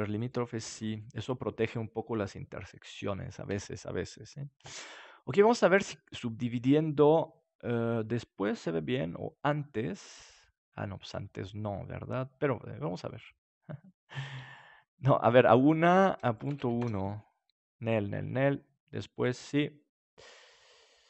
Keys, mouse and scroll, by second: 0.1-1.8 drag, 1.6-4.5 middle drag, 5.4-7.4 drag, 9.8-11.4 drag, 14.0-18.0 drag, 19.1-20.8 drag.